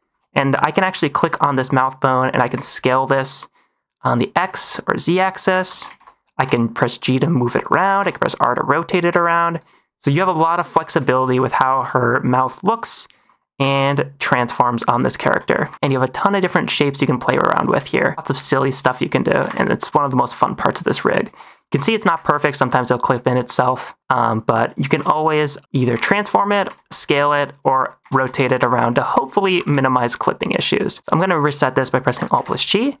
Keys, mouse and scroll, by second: 0.5 click, 1.2 middle click, 2.3 s, 2.5 x, 4.3 z, 5.4 click, 5.8 ctrl+z, 6.3 g, 7.8 r, 8.1 r, 9.7 middle click, 10.5 -, 11.0 shift+middle drag, 11.7 alt+r, 12.0 -, 12.6 click, 12.8 middle drag, 13.2 -, 13.5 g, 15.5 alt+middle click, 15.8 g, 18.1 middle click, 18.1 -, 18.3 click, 19.0 middle click, 19.3 r, 19.4 r, 20.1 click, 20.4 -, 21.2 alt+r, 21.6 -, 21.9 r, 22.3 r, 23.1 middle click, 23.6 g, 24.6 right click, 25.0 ctrl+z, 25.2 middle click, 25.6 r, 25.7 click, 25.9 g, 26.6 s, 28.0 r, 28.1 r, 28.8 alt+r, 28.9 alt+s, 29.1 alt+g, 29.6 ctrl+s, 29.8 middle drag, 30.8 click, 32.3 alt+g.